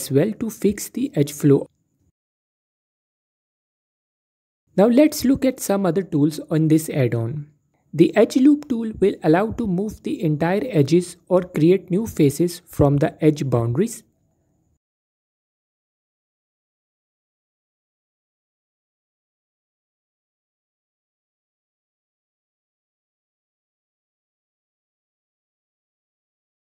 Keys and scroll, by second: 3.3 typing, 11.9 typing, 14.5 typing, 18.6 typing, 23.9 typing.